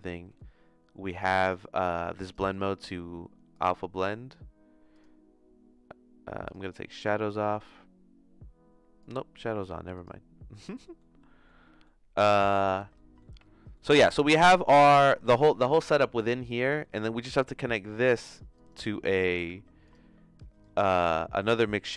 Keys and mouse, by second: 0.3 middle click, 1.1 click, 2.5-3.6 drag, 4.9-6.5 drag, 9.1-10.9 drag, 10.9 middle click, 11.6 middle click, 12.3 middle click, 13.1 middle click, 14.2-16.5 drag, 17.0 middle click, 18.5 click, 19.1 click, 19.3 shift+d, 20.6 click.